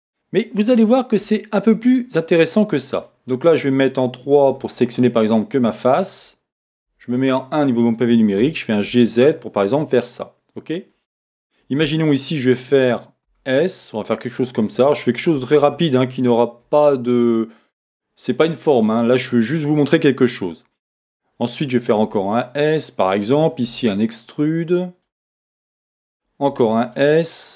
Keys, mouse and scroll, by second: 0.0-3.0 drag, 1.2 KP_1, 3.0 middle click, 4.5 3, 5.3 click, 7.0 click, 8.6 g, 11.0 click, 13.2 s, 14.8 click, 15.6 e, 18.9 click, 22.0 s, 23.2 click, 23.7 e, 25.2 click, 26.5 s.